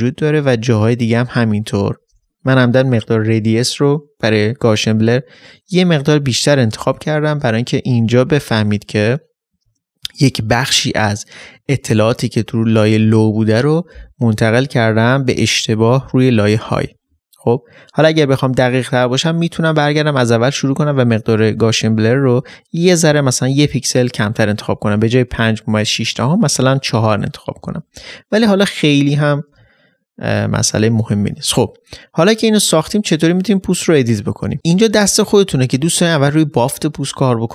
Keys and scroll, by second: 0.8 ctrl++.